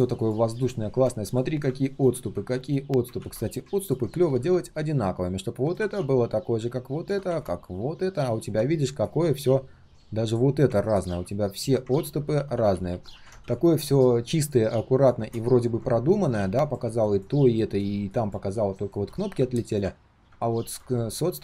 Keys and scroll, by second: 3.2 ctrl+z, 12.1 ctrl+z, 12.3 ctrl+z, 12.5 ctrl+z.